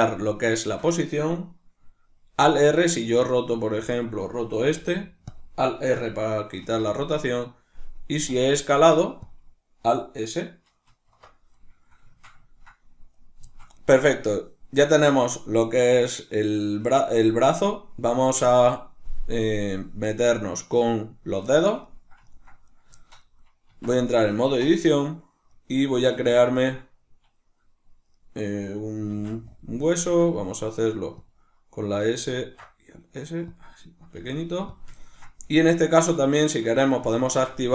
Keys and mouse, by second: 3.0 right click, 4.0 right drag, 4.8 r, 5.4 click, 6.6 alt+r, 8.2 s, 9.3 click, 10.9 alt+s, 11.9-13.2 shift+middle drag, 13.2 right click, 13.5-22.7 shift+middle drag, 22.7 right click, 22.9-29.6 shift+middle drag, 23.7 Tab, 29.2 shift+d, 29.6 click, 30.1 s, 31.3 click, 32.4 ctrl+alt+s, 33.6 click, 34.2 g, 34.8 click, 35.0 ctrl+middle click, 36.0 right click, 37.2 shift+Tab.